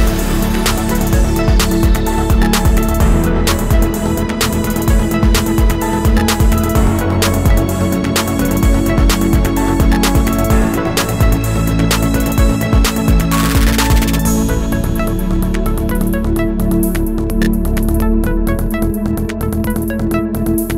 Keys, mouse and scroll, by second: 14.8 alt+scroll down 1, 15.2 space, 16.1 alt+scroll down 1, 16.5 space, 17.2 alt+scroll up 1.